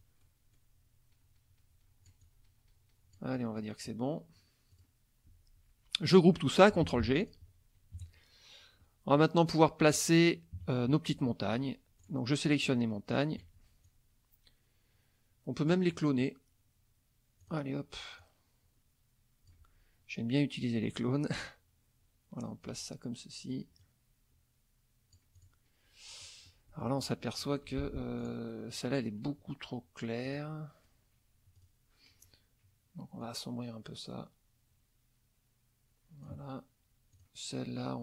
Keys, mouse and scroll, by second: 0.0 click, 0.2-0.8 scroll down 2, 2.2-3.8 drag, 4.7 click, 6.8 ctrl+g, 7.2 ctrl+click, 8.0 KP_Subtract, 8.8-10.1 scroll up 2, 10.6 KP_Subtract, 11.3 click, 12.0 click, 12.6 shift+click, 13.1 shift+click, 13.8-15.9 shift+drag, 16.2 click, 17.4 click, 18.2-19.7 drag, 20.8-22.9 ctrl+drag, 23.8-25.6 drag, 26.2 middle click, 26.8 middle click, 27.7 F2, 28.2 click, 30.2 click, 31.6 click, 33.2-36.4 drag, 37.1 click.